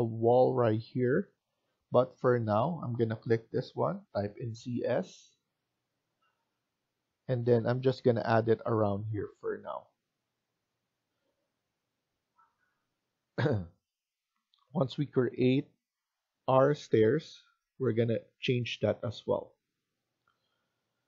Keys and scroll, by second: 4.1-4.5 typing, 13.9 Escape.